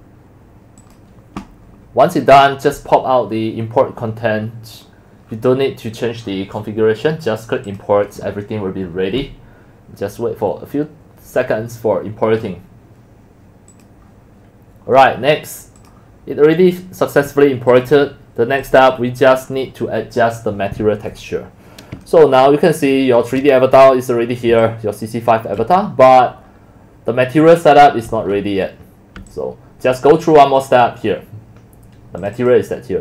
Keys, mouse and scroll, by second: 0.8 click, 4.9 click, 6.2 scroll down 2, 7.7 click, 14.1 click, 15.0 click, 17.7 click, 18.6 click, 18.8 click, 20.5 scroll up 2, 21.2 middle click, 23.8 shift+middle click, 24.8 alt+middle click, 26.5 alt+click, 29.3 alt+click, 32.2 click.